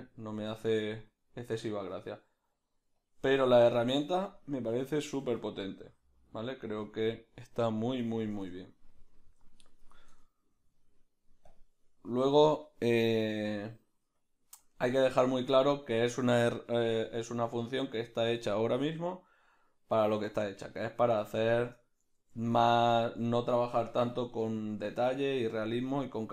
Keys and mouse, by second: 0.5 f, 5.1 f, 8.5 Tab, 8.8-11.6 right drag, 11.6 Tab, 11.6 b, 12.6 f, 13.6-26.3 drag, 16.4 f, 22.2 ctrl+z, 23.9 f.